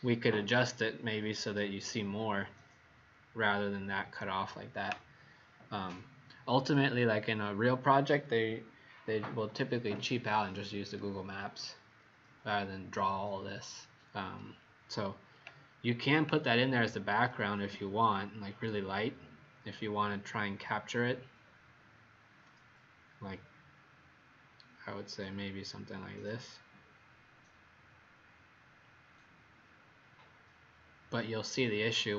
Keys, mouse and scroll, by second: 0.9-5.3 scroll up 2, 18.4 click, 20.4 scroll down 1, 21.4 scroll up 1, 25.0 scroll down 1, 26.4 middle click.